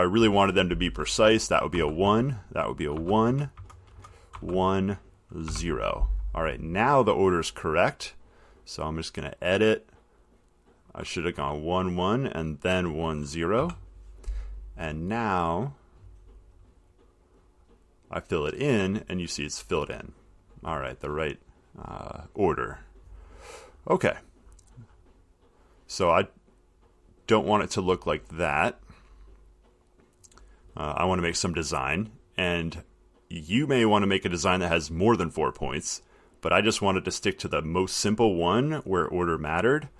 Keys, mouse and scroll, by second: 0.2 click, 2.0-4.1 typing, 5.7 0, 8.4 click, 11.4 click, 11.6 1, 13.0 click, 13.8 0, 15.1 click, 15.9 click, 17.9 click, 23.5 middle click, 27.0 click, 27.7 middle click, 28.6 click.